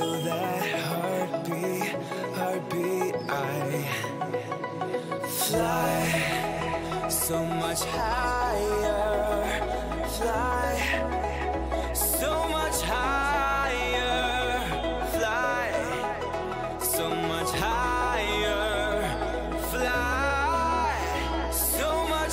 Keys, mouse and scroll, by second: 0.7-2.3 right drag, 2.3 click, 2.3-4.5 middle drag, 13.0-17.5 middle drag, 18.7-20.5 middle drag, 20.5 a, 20.8 a, 21.1 a, 21.5 right click.